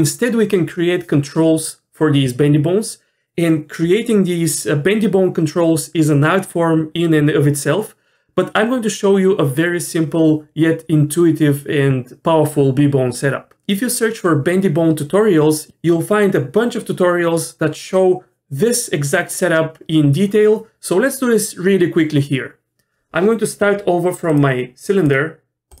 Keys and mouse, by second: 24.3-25.8 drag.